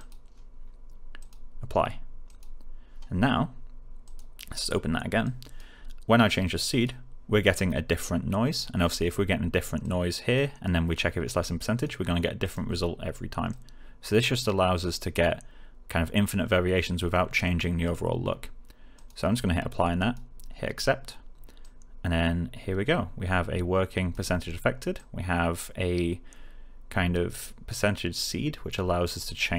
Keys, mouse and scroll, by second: 9.7-10.4 click.